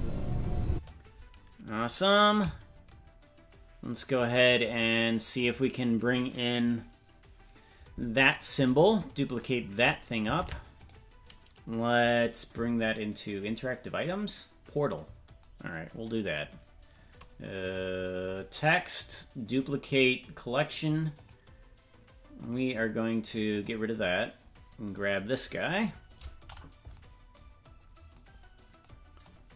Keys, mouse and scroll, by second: 0.7 space, 8.8-9.4 scroll down 8, 10.4 ctrl+Tab, 10.9 right click, 17.6 click, 18.1-18.6 scroll down 4, 19.0-21.1 right drag, 21.1 click, 22.4 click, 23.5 click, 25.0 right click, 26.1-26.6 scroll up 1, 26.9 scroll up 2, 27.5-29.5 scroll down 3.